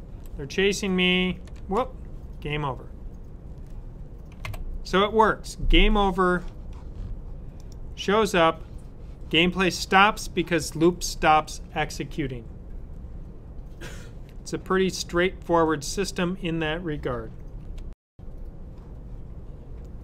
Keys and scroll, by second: 4.2 typing, 4.3 super+w.